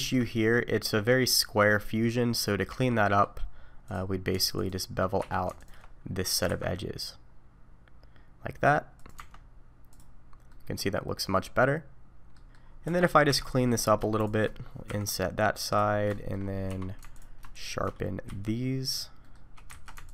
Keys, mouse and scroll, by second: 0.3 middle click, 2.7 Tab, 3.1 middle click, 3.9 click, 4.5 alt+click, 5.2 2, 5.6 alt+click, 6.5 ctrl+b, 9.2 Tab, 10.0 click, 10.5 middle click, 12.6 scroll down 3, 12.9 Tab, 13.3 3, 13.4 click, 13.6 middle click, 14.2 shift+click, 15.0 i, 15.9-16.7 scroll up 3, 16.1 shift+middle click, 16.7 2, 17.1 alt+click, 17.5 alt+shift+click, 18.3 q, 19.2 middle click, 19.7 alt+a, 20.0 alt+click.